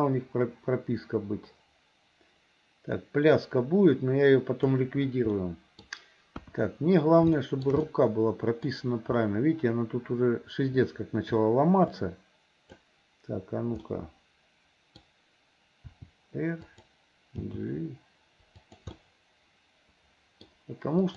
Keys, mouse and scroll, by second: 5.4 middle click, 6.4 KP_1, 7.4 shift+middle click, 7.9 middle click, 12.0 click, 13.9-15.0 middle drag, 16.0 r, 17.5 g, 19.0-20.4 scroll up 1, 20.4 middle click, 20.5 scroll down 1, 21.0 click.